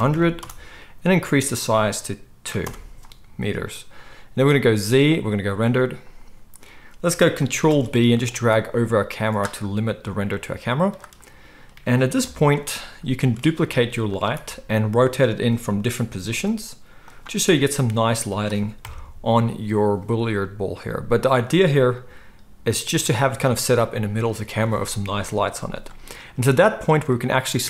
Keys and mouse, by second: 0.1 0, 4.6 z, 7.7 ctrl+b, 12.2 KP_1, 13.4 shift+d, 14.2-21.3 middle drag, 14.3 r, 16.3 shift+d, 17.5 r, 18.8 KP_0, 21.3 click, 21.4-27.6 middle drag, 22.9 g.